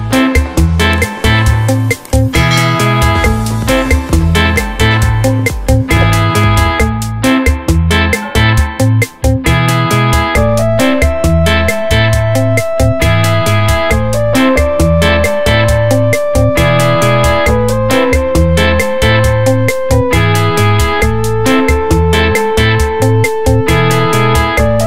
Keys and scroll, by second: 1.5 ctrl+], 4.8 ctrl+], 5.8 ctrl+], 6.3 ctrl+[, 8.0 ctrl+t, 8.8 space, 9.5 ctrl+t, 11.4 Left, 12.1 Return, 12.2 Down, 12.8 v, 13.1 Down, 13.5 Right, 13.7 Down, 13.8 Left, 14.0 Down, 14.1 Right, 14.3 Down, 14.5 Up, 14.6 Right, 14.7 Up, 14.9 Left, 15.1 Up, 15.4 Right, 18.6 space, 19.8 t, 23.1 Return, 23.4-24.8 typing.